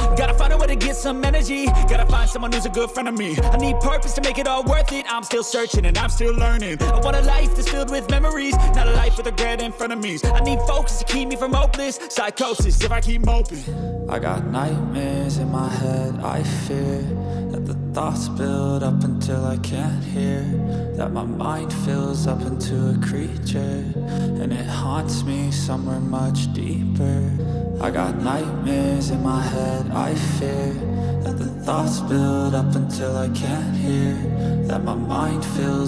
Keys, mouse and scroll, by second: 1.0 alt+shift+click, 4.1 double click.